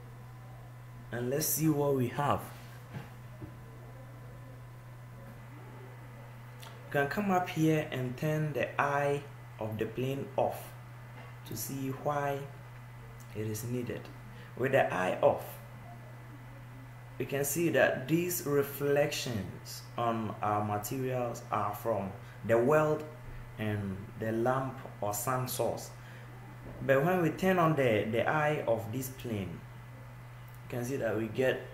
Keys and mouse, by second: 8.9-16.9 drag, 17.0-19.6 drag, 30.7-31.7 drag.